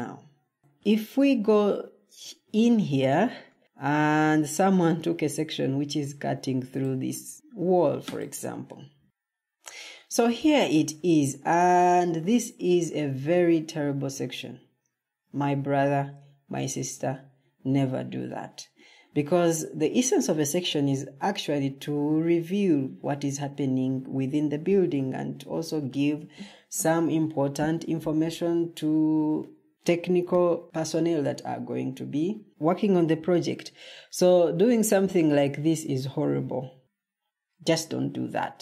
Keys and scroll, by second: 0.9 Escape, 3.6 ctrl+d.